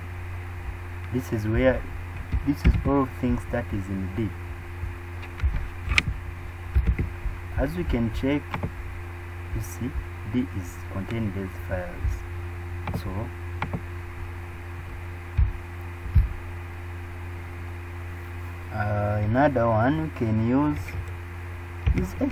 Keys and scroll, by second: 2.6 super+e, 6.7 super+Up.